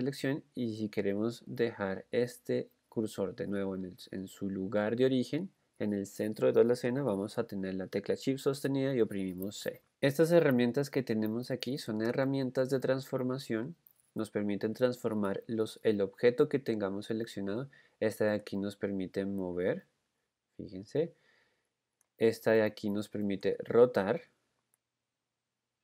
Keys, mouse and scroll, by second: 9.9 shift+c, 10.2 click, 18.7 click, 19.7 click, 23.5 click, 25.3-25.8 drag.